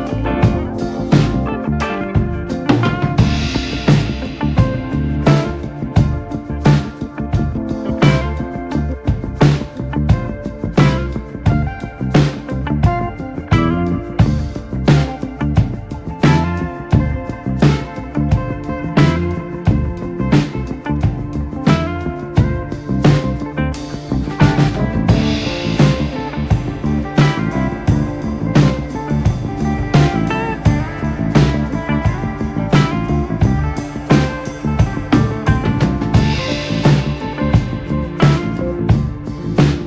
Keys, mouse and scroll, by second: 0.0 KP_1, 1.4 v, 3.3 g, 4.3 click, 5.5 click, 5.9 KP_3, 6.4 click, 6.9 scroll down 1, 7.0 middle click, 7.9 scroll up 2, 8.0 middle click, 8.4 click, 8.6 click, 9.2 ctrl+z, 9.3 ctrl+z, 10.4 Tab, 11.1-11.7 drag, 11.7 Tab, 12.2 middle click, 12.7 click, 13.9 click, 14.9 middle click, 15.4 click, 16.1 click, 16.4 click, 16.9 middle click, 17.3 click, 18.1 click, 18.4 click, 18.9 click, 19.5-20.5 middle drag, 20.5 KP_7, 21.1 ctrl+r, 23.3-23.8 scroll down 1, 23.8 shift+middle click, 24.4 ctrl+r, 25.3 ctrl+r, 26.4 ctrl+s, 26.7 click, 26.8 Tab, 26.9 drag, 27.2 scroll down 3, 27.5 scroll up 2, 27.6 scroll down 1, 27.7-28.7 middle drag, 28.7 KP_7, 28.8-29.1 scroll up 4, 29.1 click, 29.3 Tab, 29.5-30.2 scroll up 2, 29.7 shift+middle click, 30.2 shift+middle click, 31.1 ctrl+r, 35.5 click, 35.9 alt+/, 36.4 click, 37.0 ctrl+z, 37.4 alt+/, 37.6 click, 37.8 scroll down 2, 37.9 middle click, 38.7 ctrl+z, 38.9 ctrl+z, 39.6 KP_7.